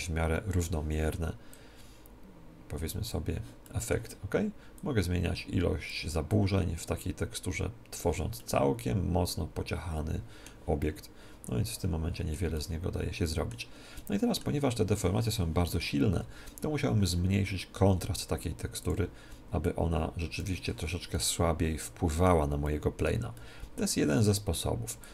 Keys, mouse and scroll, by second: 0.0-1.5 middle drag, 1.5-3.3 drag, 3.6-5.3 middle drag, 4.7-8.1 drag, 8.3-10.1 middle drag, 10.7-18.8 middle drag, 18.8-21.3 drag, 21.1-25.0 middle drag, 25.0-25.1 drag.